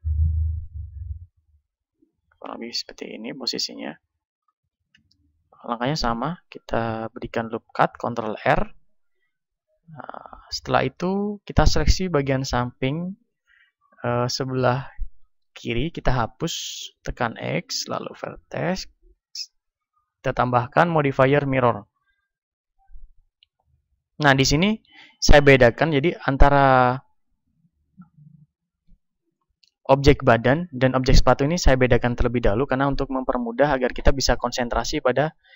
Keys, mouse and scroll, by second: 0.8-3.4 drag, 3.4-5.9 middle drag, 5.0 Tab, 5.9 ctrl+r, 7.0-12.6 drag, 8.6 a, 11.2 b, 16.0 x, 21.9-23.9 drag, 23.9-27.6 middle drag, 27.6-30.9 drag, 29.1-35.5 right drag.